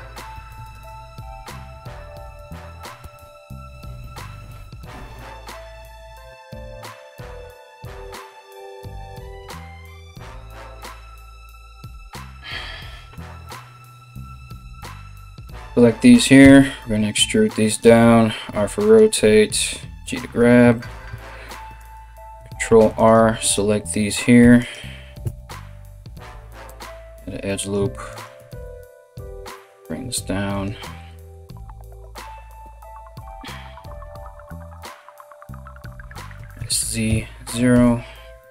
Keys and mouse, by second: 1.9 right click, 2.6 f, 14.6 KP_3, 16.0 e, 17.6 r, 18.7 g, 21.1 ctrl+r, 23.0 right click, 24.0 1, 24.2 right click, 24.8 g, 27.2 right click, 27.7 right click, 28.2 g, 29.6 r, 31.5 right click, 32.2 g, 34.2 right click, 35.0 right click, 35.3 shift+right click, 35.9 s.